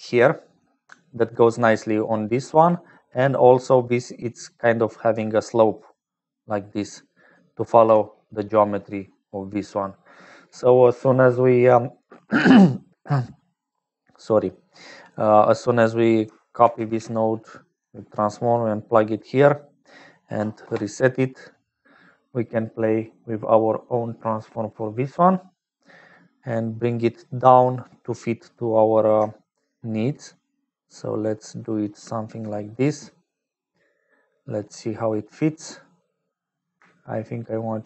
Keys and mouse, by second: 1.4 click, 2.0-3.2 middle drag, 5.6 d, 5.8-7.4 d, 5.8-7.4 drag, 7.4 right click, 7.4 middle click, 7.8 d, 9.5-10.9 right drag, 12.0 click, 13.4 right click, 14.3 click, 15.8 right click, 16.6 ctrl+c, 17.2 ctrl+v, 17.8 g, 20.6 BackSpace, 21.9 click, 27.0-28.1 drag, 29.6-32.3 shift+drag, 34.4 click.